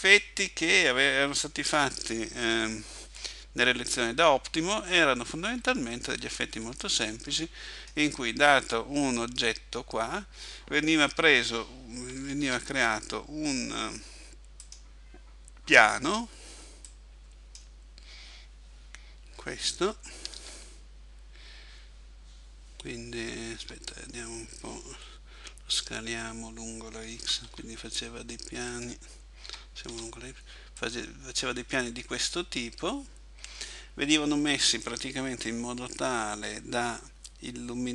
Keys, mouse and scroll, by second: 5.5 Escape, 6.7 middle click, 12.5 shift+a, 16.9 click, 20.4 Tab, 23.7 Tab, 27.3 s, 28.9 click, 29.5 s, 30.9 click, 32.2 middle click, 34.9 middle click.